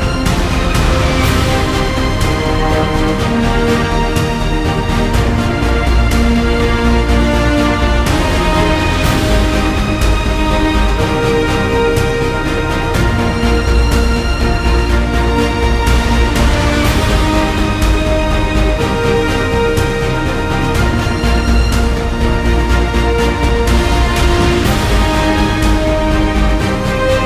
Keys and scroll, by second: 14.1 super+z, 14.5 super+z.